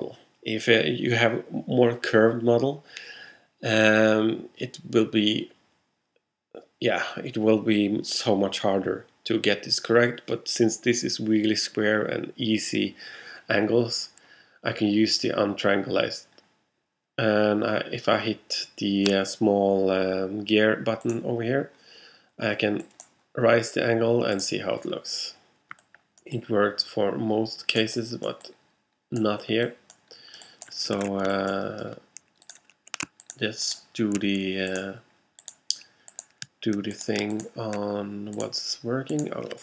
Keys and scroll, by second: 31.0 alt+super+z.